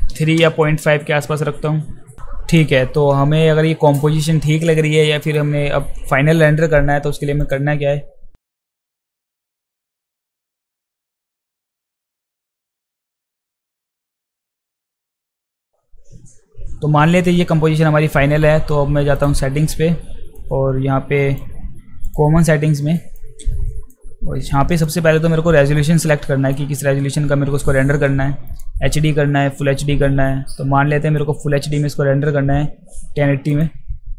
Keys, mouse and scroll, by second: 5.2 click, 7.4 click, 8.5-8.8 alt+middle drag, 9.1 alt+middle click, 10.0 click, 10.3 click, 10.4 alt+click, 10.7 alt+click, 10.8 alt+middle click, 10.8 alt+click, 10.9 alt+middle click, 11.2 alt+middle click, 11.4 alt+click, 11.6 f, 11.7 alt+click, 12.0 alt+middle click, 12.1 alt+right click, 12.4 alt+right click, 12.9 click, 13.0 click, 13.1 click, 13.5 click, 13.6 click, 13.8 click, 14.4 ctrl+s, 14.7 click, 14.9 click, 15.2 click, 15.3 s, 15.6 click, 19.2 click, 20.4-21.3 drag, 22.0 click, 23.2-23.9 drag, 24.7 click, 26.0 click, 33.5 click.